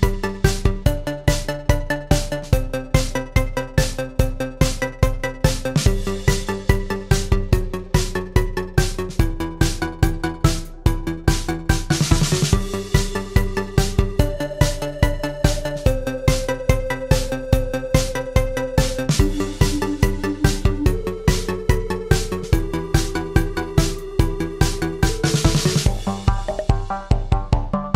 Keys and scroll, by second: 10.9 Escape, 13.7 F8, 17.5 Escape, 18.3 ctrl+a, 21.0 BackSpace.